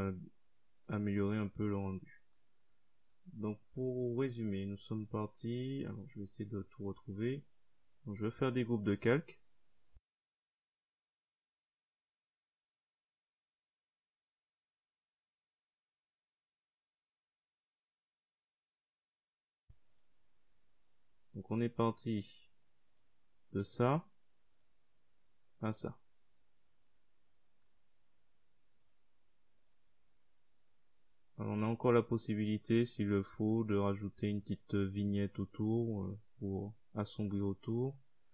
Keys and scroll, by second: 9.6 Caps_Lock, 9.8 g, 10.0 Caps_Lock, 10.1 c, 10.1 Return, 12.0-13.3 typing, 13.2 Caps_Lock, 13.4 Return, 16.9-17.7 typing.